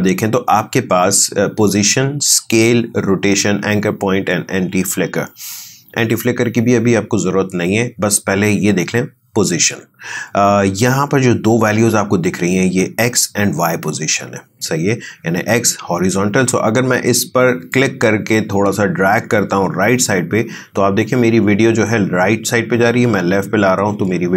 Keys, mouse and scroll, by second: 18.7-24.3 drag.